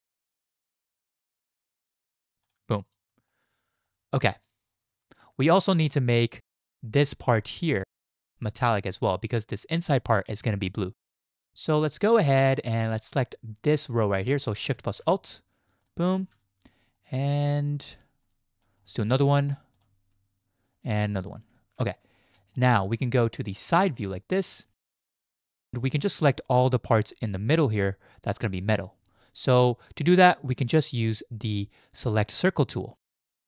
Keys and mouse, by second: 0.1 shift+click, 0.9 alt+shift+click, 1.1 alt+shift+click, 1.9 alt+shift+click, 2.4 alt+shift+click, 3.3-4.3 shift+drag, 5.8 shift+click, 7.5 shift+click, 12.2 shift+click, 15.8 alt+shift+click, 17.0-18.6 shift+drag, 19.7 alt+shift+click, 22.5 shift+click, 24.4 click, 25.4 shift+click, 31.1-32.7 drag.